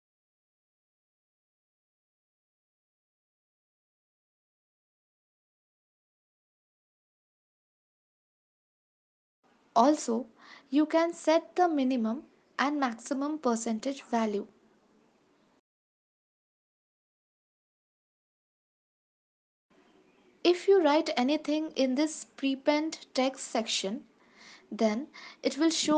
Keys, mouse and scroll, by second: 2.8 click, 5.4 ctrl+s, 6.3 click, 6.6 space, 8.9 ctrl+s, 11.8 click, 14.9 click, 16.8 ctrl+s, 17.6 click, 18.0 space, 19.6 ctrl+s, 19.6 space, 22.4 click.